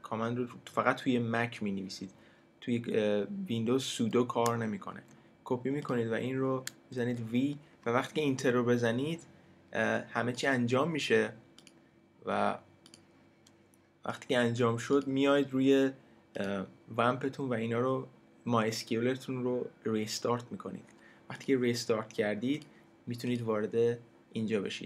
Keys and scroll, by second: 4.9 super+c, 7.0 super+v.